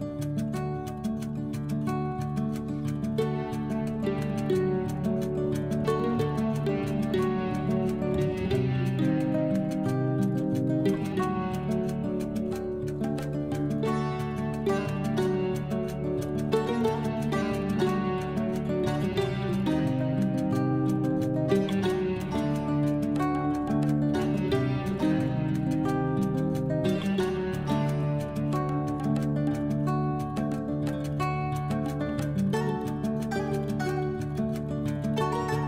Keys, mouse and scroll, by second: 1.1-1.9 typing, 4.7-5.7 typing, 7.1-9.9 typing, 11.1-19.1 typing, 22.2-29.6 typing, 31.4 typing, 35.1 Return, 35.4 Tab.